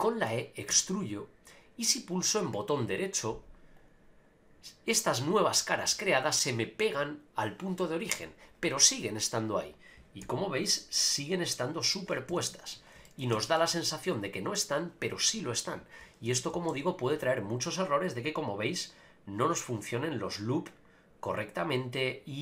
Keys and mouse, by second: 0.0 middle click, 0.7 e, 3.8 right click, 10.2 g, 11.5 right click, 12.3 a, 12.4 a, 13.0 shift+middle click, 13.3 Tab, 13.5-14.6 middle drag, 16.3 Tab, 16.7 ctrl+r.